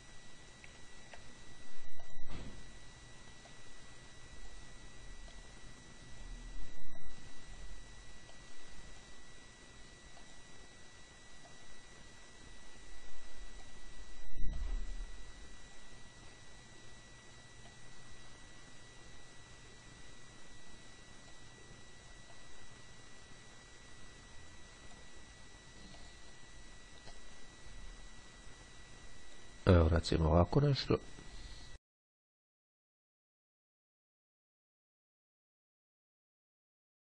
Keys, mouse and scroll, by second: 1.0-1.5 ctrl+scroll down 2, 2.2 click, 3.6-5.2 drag, 5.5-6.9 drag, 7.2-8.2 drag, 8.5-9.6 drag, 10.3 click, 11.5-14.3 drag, 14.7-16.4 drag, 17.8-22.0 drag, 22.6-25.6 drag, 26.2 click, 27.3-30.0 drag, 32.3-33.2 ctrl+scroll up 2, 33.7-34.9 drag, 36.3-37.0 drag.